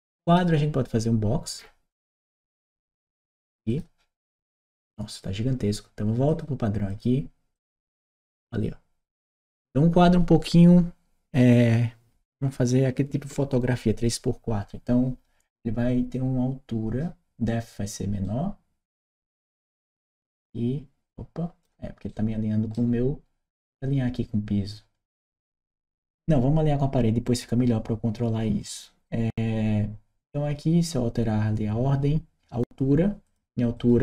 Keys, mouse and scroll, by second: 3.5 click, 6.1 click, 6.7 click, 7.4 click, 18.0 right click, 19.7-21.4 drag, 21.9 right click, 33.1 click, 33.6 click.